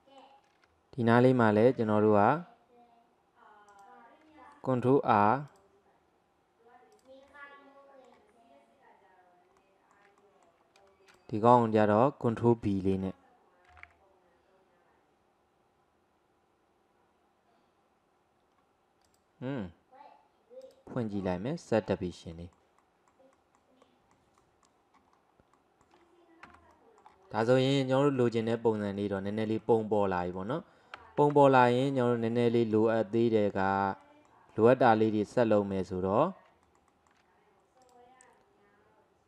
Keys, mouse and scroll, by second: 0.0-1.7 shift+middle drag, 1.7 ctrl+r, 5.2 ctrl+r, 7.3-11.1 middle drag, 11.1 click, 11.5 alt+click, 11.9 alt+middle click, 12.4-13.7 middle drag, 13.7 ctrl+b, 20.7 click, 21.3-25.2 middle drag, 25.2-25.6 scroll down 1, 25.6-26.5 middle drag, 26.5 Tab, 26.8 middle click, 27.3-27.6 scroll down 3, 27.6-31.4 middle drag, 31.4 Tab, 32.0-32.4 scroll up 1, 32.4-36.7 middle drag, 36.9 alt+middle click, 37.9 click.